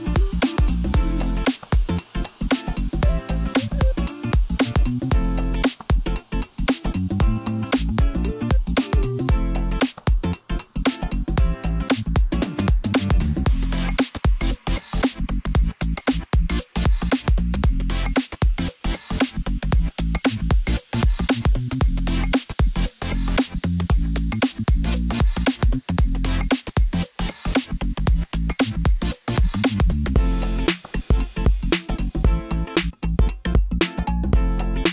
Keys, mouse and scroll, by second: 0.0 drag, 1.0-4.0 drag, 4.6 click, 5.6 a, 6.5-7.5 middle drag, 7.5-8.8 scroll up 2, 8.8 ctrl+t, 11.4 i, 13.7 click, 14.3-16.0 scroll up 4, 16.0-17.8 drag, 18.3-20.8 middle drag, 20.8 click, 21.6-22.9 middle drag, 22.9 x, 24.5-25.0 scroll down 2, 25.0-25.4 scroll up 2, 25.4-26.7 middle drag, 26.7 Tab, 28.1 ctrl+a, 30.1 click, 30.5 click, 31.1-32.7 middle drag, 32.7 drag.